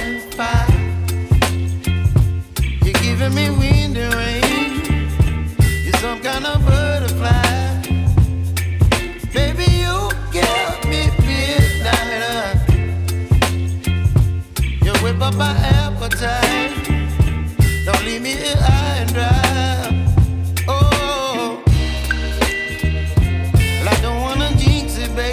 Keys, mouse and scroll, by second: 0.4-1.8 shift+drag, 1.8 alt+scroll down 1, 3.0-3.5 alt+scroll up 1, 3.8 scroll up 1, 4.6-8.0 drag, 9.7 alt+scroll up 1, 10.4 space, 10.5 click, 10.8 space, 11.2 space, 16.2 click, 19.2 click, 19.2 click, 22.9 click, 22.9 click.